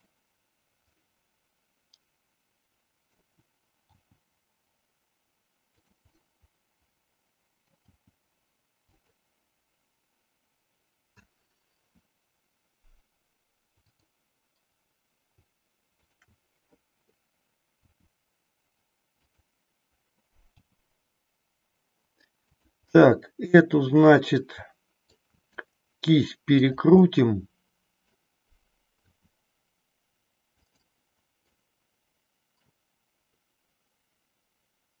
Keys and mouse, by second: 0.0 click, 1.0-3.2 middle drag, 4.1 g, 5.8 click, 6.2-7.7 middle drag, 7.8 g, 9.0 click, 13.8-14.8 drag, 16.0 shift+click, 17.8 r, 19.3 click, 20.6 g, 22.6 click, 23.0-25.1 middle drag, 25.5 r, 26.7 click, 27.1-28.2 middle drag, 29.1 r, 31.5-32.7 middle drag.